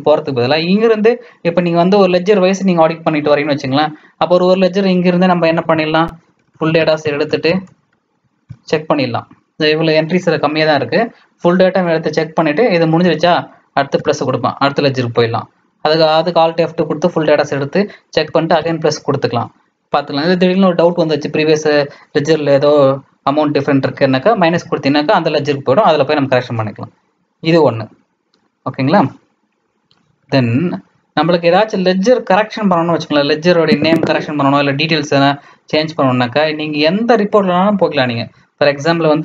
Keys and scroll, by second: 5.5 alt+F2, 6.1-8.9 typing, 9.9-12.1 typing, 24.5 -, 30.9 Escape, 31.4 Escape, 32.1 Escape, 32.5 Escape, 32.9 Escape, 33.6 Escape, 34.2-38.2 Escape, 37.2 Down, 37.4 Down, 37.6 Down, 37.6 Down, 37.8 Down, 37.9 Down, 38.6 Up.